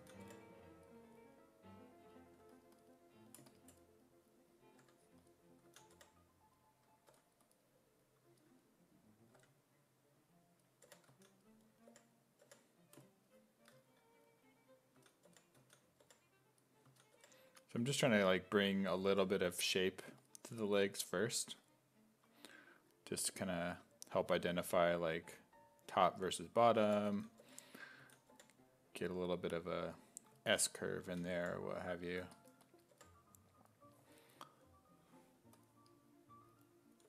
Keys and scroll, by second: 0.0-0.7 typing, 2.4 2, 4.8-7.1 typing, 9.4 w, 10.6-12.4 typing, 14.7-19.1 typing, 24.5 w, 26.6-28.3 typing, 31.1 s, 31.4 5, 32.9 5.